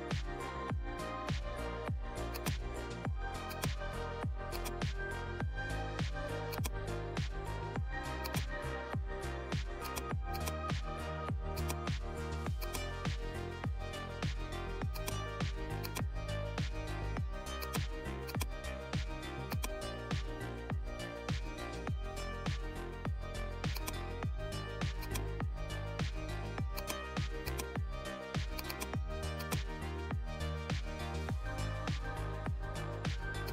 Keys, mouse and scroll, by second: 2.3 click, 3.7 right click, 4.5 click, 6.5-8.2 drag, 8.2-17.6 drag, 20.7-22.0 scroll down 1, 23.7-28.5 drag, 30.9-31.6 scroll down 1, 32.8 scroll up 1, 33.4 click.